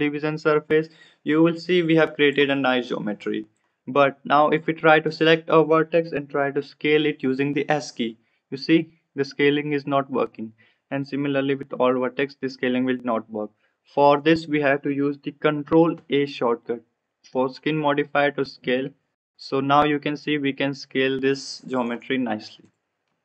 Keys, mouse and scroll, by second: 7.5 s, 11.0 click, 11.5 s, 15.9 ctrl+a, 22.6 click.